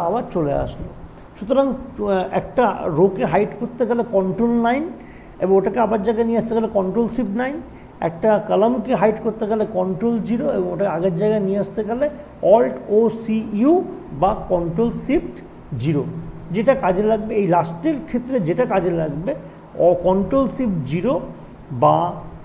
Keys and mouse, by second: 1.4 typing.